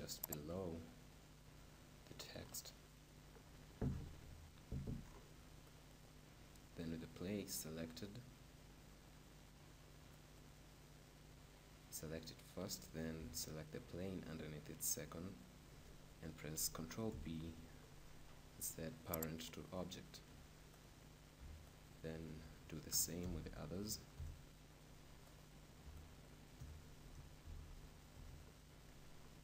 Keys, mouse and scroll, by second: 0.5-2.2 drag, 2.9-6.8 middle drag, 4.1 KP_7, 5.9-7.7 right drag, 10.4-12.3 right drag, 17.0 ctrl+p, 20.9-23.7 right drag, 23.1 ctrl+shift+p, 25.4-27.9 right drag, 27.3 ctrl+p.